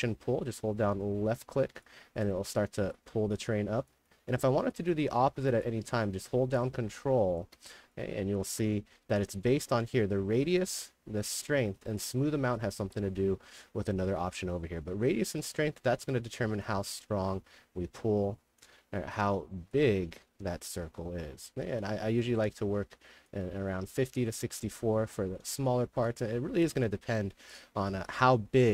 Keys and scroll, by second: 24.2-25.8 typing, 27.9-28.7 typing.